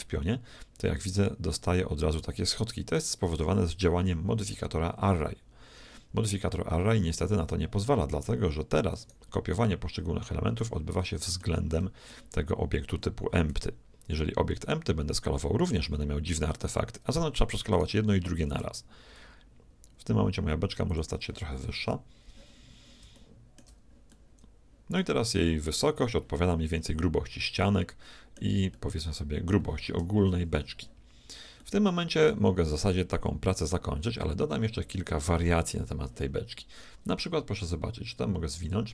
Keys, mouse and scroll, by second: 0.0 s, 6.6-8.4 middle drag, 9.0-10.5 right drag, 9.7-10.9 middle drag, 13.3 s, 13.4 middle click, 17.9-19.4 right drag, 18.4 s, 21.8 KP_1, 23.3-26.0 middle drag, 26.7-28.5 middle drag, 28.9-30.8 middle drag, 30.2 KP_1, 31.6-33.6 middle drag, 38.6-38.9 drag.